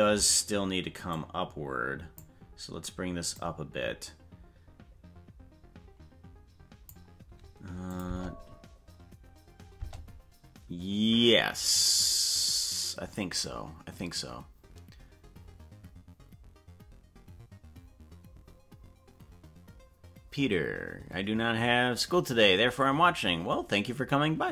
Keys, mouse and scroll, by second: 1.1-2.2 drag, 3.3-6.9 drag, 7.9 click, 8.0 space, 9.8 space.